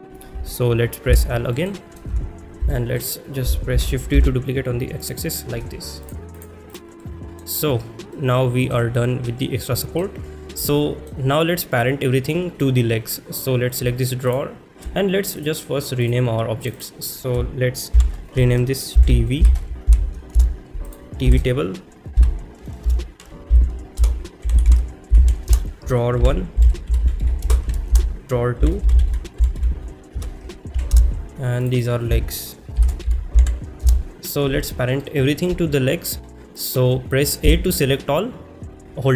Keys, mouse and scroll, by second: 1.1 l, 1.7 middle click, 2.8 shift+middle click, 2.8 KP_1, 5.0 click, 5.0 shift+d, 5.0 x, 6.0-6.5 drag, 6.7 click, 7.0 middle click, 8.1-8.7 middle drag, 9.6-10.0 middle drag, 10.7-11.1 shift+middle drag, 14.3 shift+click, 15.4 click, 16.6 click, 16.8-20.4 drag, 21.1-25.5 shift+drag, 25.8-27.9 drag, 28.3-31.0 drag, 31.6 click, 31.8-33.9 drag.